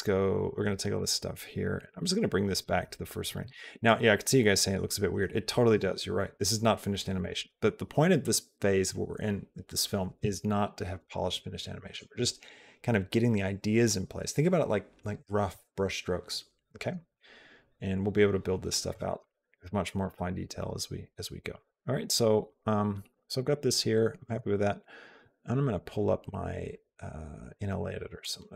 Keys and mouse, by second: 0.8 click, 2.0 click, 3.3 b, 5.6 g, 7.2 click, 8.1-11.8 drag, 17.0-18.8 drag, 19.0 click, 19.9-21.4 drag, 21.5 click, 22.3-24.1 drag, 28.0 click.